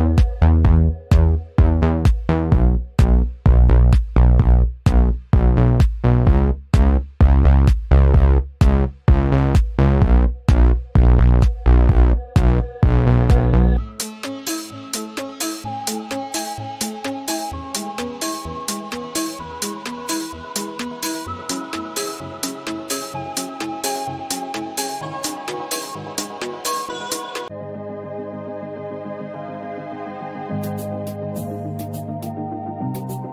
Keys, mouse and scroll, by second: 1.1 click, 2.8 click, 3.8-4.3 scroll down 1, 5.3 click, 5.8-6.8 scroll down 1, 7.0-11.3 drag, 11.3 ctrl+z, 12.5 ctrl+c, 12.7 ctrl+f, 14.1-14.5 scroll down 1, 15.5 scroll up 1, 15.6-22.0 drag, 22.0 click, 24.8 click, 27.2-29.9 drag, 30.4 click, 31.7 click.